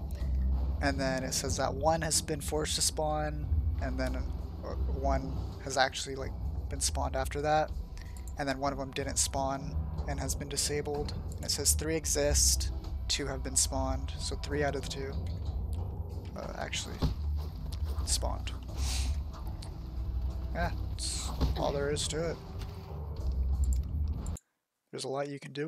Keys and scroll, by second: 14.1 Tab, 14.8-18.0 typing, 20.5 d, 21.4 Escape.